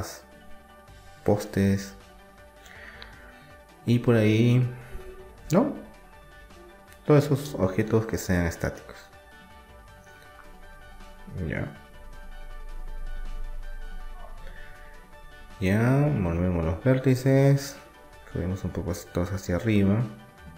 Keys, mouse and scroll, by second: 2.1 g, 5.7-8.0 middle drag, 8.0 click, 8.0 right click, 8.2 click, 8.5 right click, 8.6-9.7 drag, 9.4 g, 14.1-17.0 right drag, 17.0-18.7 drag, 18.7 middle click.